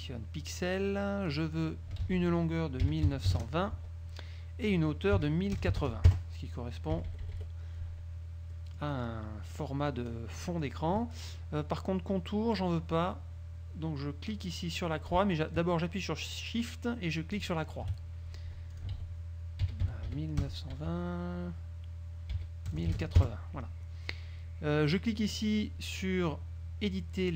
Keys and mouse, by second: 0.9 click, 1.5 click, 2.2 ctrl+a, 3.0 KP_1, 3.2 KP_9, 3.4 KP_2, 3.9 Tab, 5.3 KP_1, 5.7 KP_0, 5.9 KP_8, 6.2 KP_Enter, 7.1 KP_Subtract, 8.7 click, 9.7-10.4 drag, 10.5 click, 17.5 shift+click, 18.8 ctrl+click, 19.1 ctrl+a, 19.8 KP_1, 20.0 KP_9, 20.3 KP_2, 20.6 KP_0, 20.9 Tab, 22.5 KP_1, 22.9 KP_0, 23.1 KP_8, 23.3 KP_Enter.